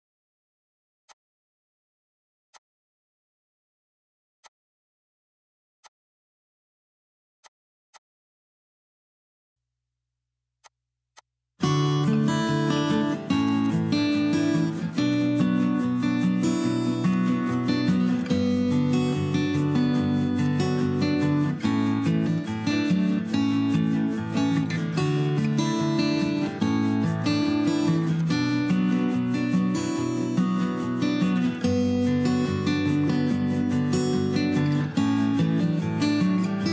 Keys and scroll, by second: 1.4 m, 14.1 BackSpace, 14.2 Return, 14.2 BackSpace.